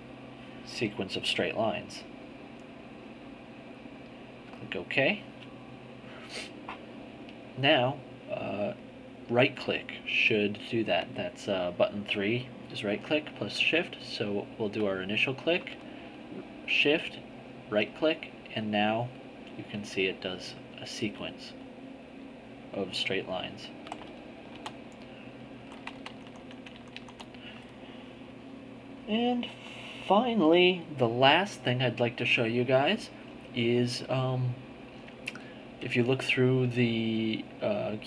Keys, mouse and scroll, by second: 2.2 click, 4.6 click, 14.7 click, 17.4 shift+right click, 18.2 right click, 21.3 right click, 22.6 right click, 24.6 z, 25.6 z.